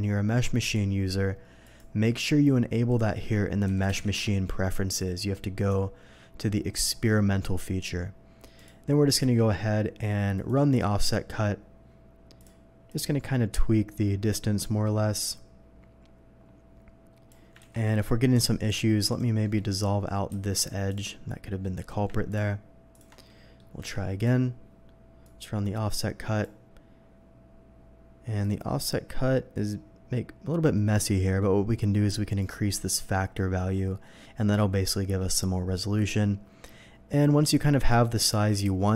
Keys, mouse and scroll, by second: 0.6 click, 1.6 click, 2.9 click, 3.7 m, 4.2 h, 4.9 click, 5.5 click, 6.2 middle click, 6.4 middle click, 6.9 middle click, 8.6 click, 9.3 y, 10.3 y, 10.3 click, 12.4 click, 12.9-17.3 drag, 17.6 ctrl+z, 17.8 middle click, 18.1 middle click, 19.1 click, 19.4 middle click, 20.3 ctrl+x, 20.9 click, 21.6 middle click, 22.3 ctrl+click, 22.9 ctrl+click, 23.3 ctrl+middle click, 23.8 y, 24.2 click, 25.2-26.4 drag, 26.7 middle click, 28.4-32.4 drag, 34.0 middle click, 35.2 middle click, 37.9-38.9 drag.